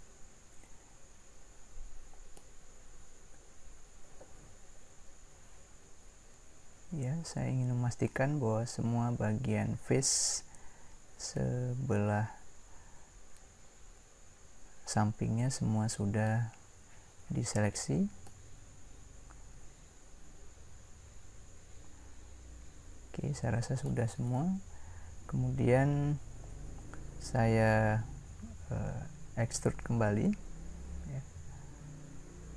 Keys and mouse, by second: 3.2-4.5 middle drag, 5.7-7.5 middle drag, 18.6-19.9 middle drag.